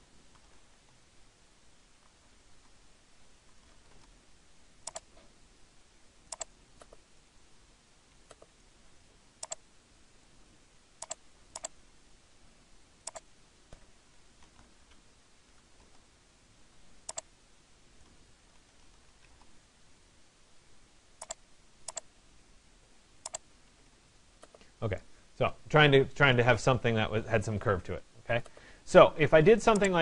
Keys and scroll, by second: 1.6 m, 7.6 Escape, 15.0 o, 23.3 Escape.